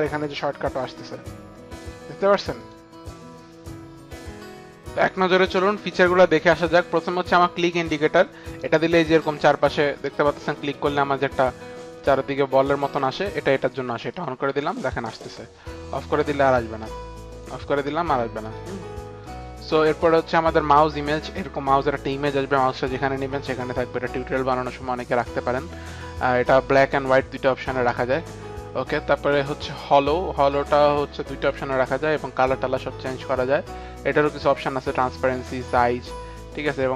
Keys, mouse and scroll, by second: 1.8 click, 2.5 click, 7.7 click, 9.1 click, 10.1 click, 10.6 click, 11.3 click, 14.4 click, 14.8 click, 15.0 click, 16.4 click, 17.6 click, 20.6 click, 29.9 click, 32.0 click, 35.8 click.